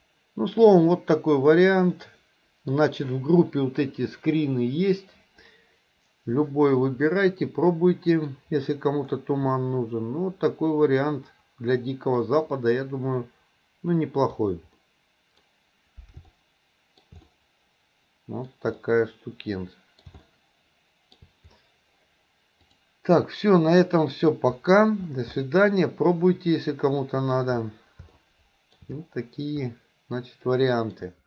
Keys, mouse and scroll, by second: 22.9 click, 24.0 middle click, 25.6-27.5 shift+middle drag, 28.3-29.0 shift+middle drag, 29.9-31.2 middle drag.